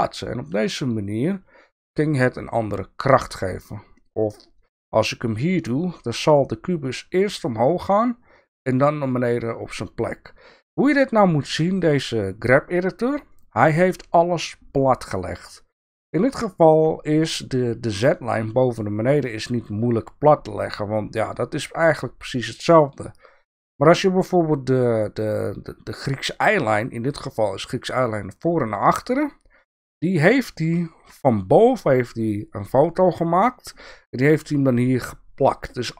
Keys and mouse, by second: 4.6-5.6 drag, 30.9 KP_7.